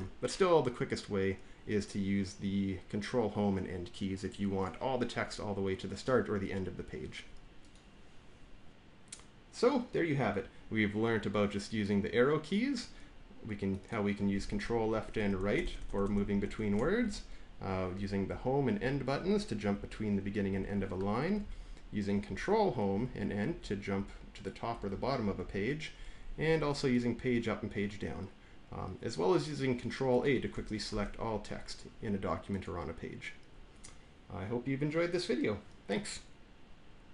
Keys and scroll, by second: 15.0 ctrl+Right, 16.9 Down, 18.2 Home, 18.7 End, 19.1 Home, 19.6 End, 20.1 Home, 20.4 End, 21.3 Down, 22.8 ctrl+shift+Home, 23.4 ctrl+shift+End, 23.9 ctrl+shift+Home, 24.6 ctrl+shift+End, 25.1 ctrl+shift+Home, 30.8 ctrl+a.